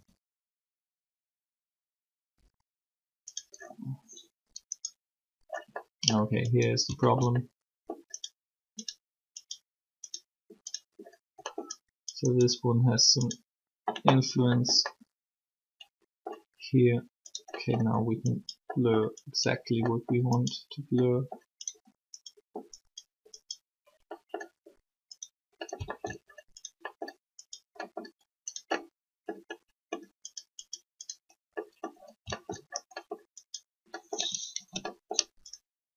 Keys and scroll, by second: 34.5 ctrl+z.